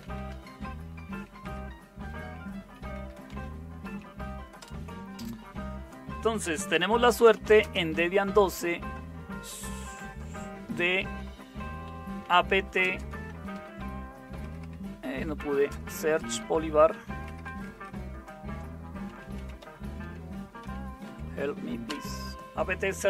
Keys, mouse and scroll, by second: 0.0-1.9 typing, 2.9-4.6 typing, 6.9-17.8 typing, 14.4 Return, 19.1-21.8 typing.